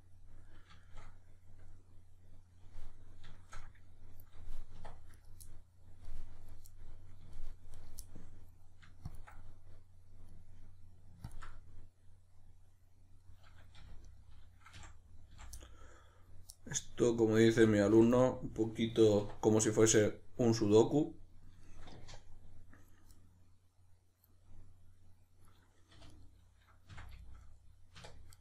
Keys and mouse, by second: 4.7 1, 5.1 right click, 5.4-7.7 middle drag, 7.7 right click, 8.0-9.1 middle drag, 9.1 ctrl+click, 9.4-11.3 middle drag, 11.3 ctrl+drag, 11.5-14.1 middle drag, 13.8 2, 14.1 right click, 14.8 f, 15.6-17.1 middle drag, 17.1 right click, 17.5 f, 18.2-19.6 middle drag, 19.2 1, 19.6 right click, 19.9-26.1 middle drag, 25.9 2, 26.1 right click, 26.9 f, 27.2-28.3 shift+middle drag, 28.0 1, 28.3 right click.